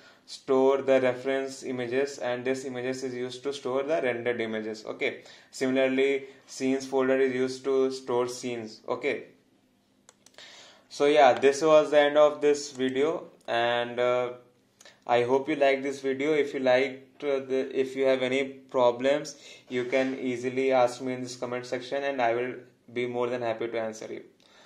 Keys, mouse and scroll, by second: 12.8 click.